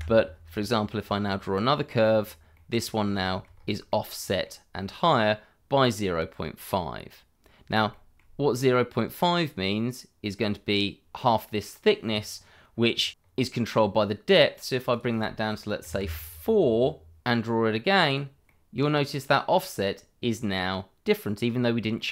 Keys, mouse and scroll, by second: 0.7 scroll down 1, 1.0 middle click, 1.5 click, 2.5 middle click, 3.2 shift+middle click, 3.5-3.9 scroll up 1, 3.9 middle click, 7.9 shift+middle click, 13.0 scroll down 1, 13.2 scroll up 1, 14.2 click, 16.2 middle click, 16.6 click, 16.8 middle click, 17.4 click, 18.4 middle click, 21.5 middle click.